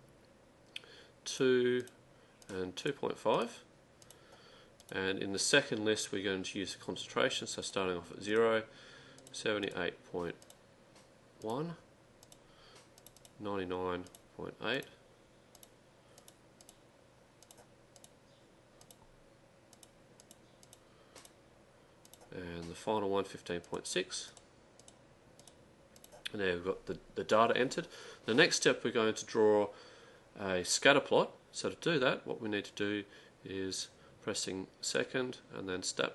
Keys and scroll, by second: 1.4 2, 1.9 Return, 2.5 2, 2.9 ., 7.0-7.7 typing, 9.0-9.7 typing, 12.3-13.0 typing, 16.4-17.2 typing, 19.6-20.3 typing, 21.9-22.6 typing, 24.6-26.0 typing.